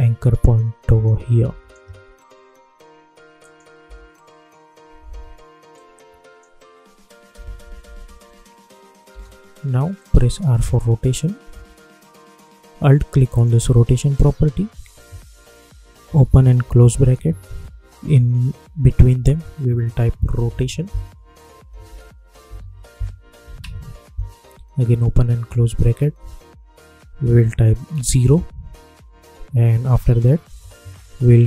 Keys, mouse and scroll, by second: 3.8 space, 5.7 click, 6.7-7.3 scroll down 1, 7.3 space, 9.9 click, 10.5 r, 13.3 alt+click, 16.0 [, 16.6 ], 18.1 Left, 19.8-21.0 typing, 22.1-23.0 typing, 23.5 Return, 24.8 [, 29.8 Right.